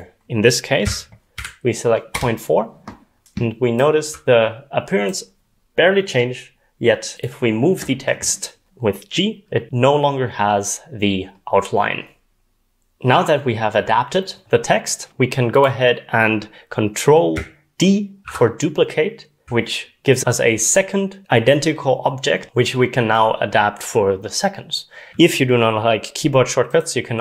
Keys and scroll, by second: 1.1-1.8 typing, 2.1 Return, 4.0 typing, 8.4-9.1 typing, 18.3 ctrl+d.